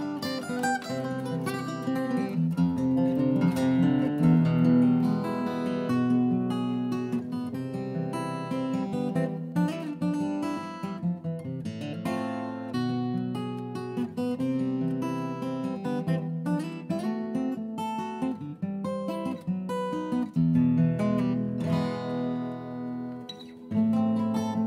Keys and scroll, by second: 3.2 Delete, 3.6 m, 6.9 Delete, 9.4 Delete, 9.9 m, 13.0 Delete, 13.3-14.3 typing, 16.4 s.